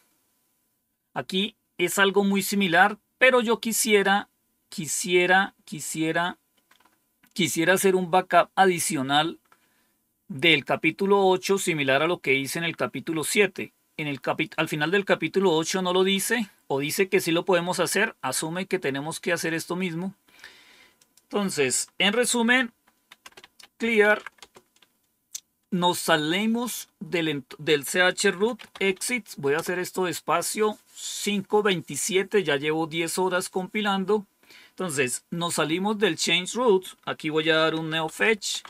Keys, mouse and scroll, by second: 3.8 scroll down 2, 4.8-5.5 scroll down 2, 5.5-6.4 scroll down 1, 18.3 scroll down 2, 19.3-20.1 scroll down 2, 20.9 click, 22.6-24.6 typing, 28.0-29.3 typing, 29.4 Return, 37.4-38.6 typing.